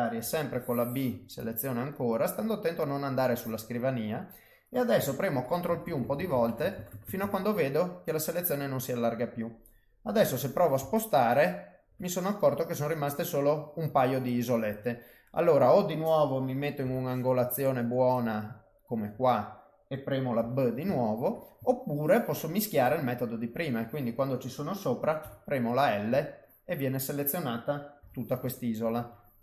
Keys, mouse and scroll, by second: 0.2 b, 3.9 middle click, 5.3 ctrl+KP_Add, 5.5-6.9 ctrl+KP_Add, 7.0 ctrl+KP_Add, 7.2 ctrl+KP_Add, 8.2 middle click, 10.2 g, 12.3 middle click, 16.8 b, 18.2 middle click, 20.4 g, 21.7 ctrl+middle click, 23.0 middle click, 25.2 l, 26.1 l, 26.6 middle click, 28.0 g, 29.2 middle click.